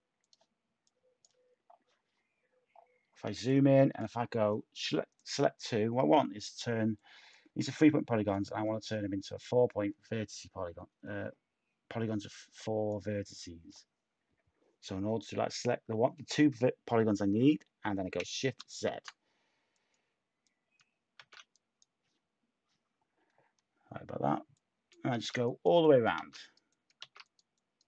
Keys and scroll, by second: 18.5 z, 21.2 z, 24.8 z, 25.1 z, 26.1 z.